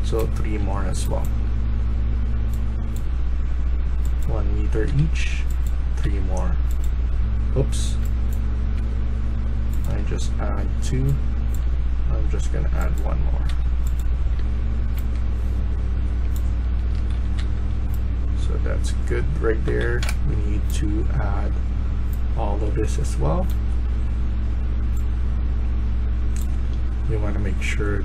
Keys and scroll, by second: 0.0-0.6 typing, 4.7 1, 5.9 2, 7.9-8.6 a, 13.3-17.3 typing, 19.5-20.6 typing, 23.6 typing.